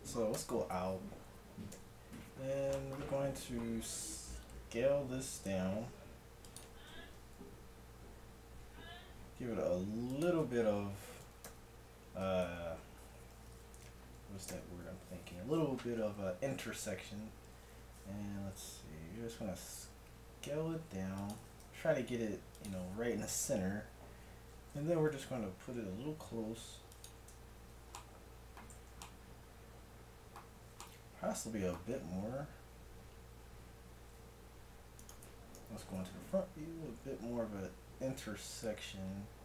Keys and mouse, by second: 0.5 KP_Divide, 1.8 KP_1, 4.5 s, 7.1 g, 11.3 KP_1, 11.5 KP_3, 12.5 ctrl+KP_1, 13.9 KP_3, 14.5 ctrl+KP_3, 16.0 z, 18.2 z, 19.3 s, 21.7 g, 23.3 KP_1, 24.7 g, 27.6 z, 28.1 click, 28.9 z, 34.0 g, 35.5 KP_1, 36.2 g.